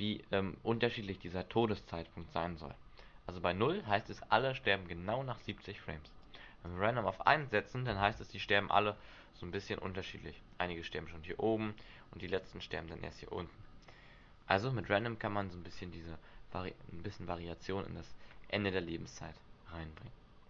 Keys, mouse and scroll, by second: 3.9-5.5 scroll down 4, 6.2 click, 8.0 alt+a, 8.9 scroll down 1, 9.6-10.3 scroll down 6, 14.7 Escape, 15.7-16.2 scroll up 7.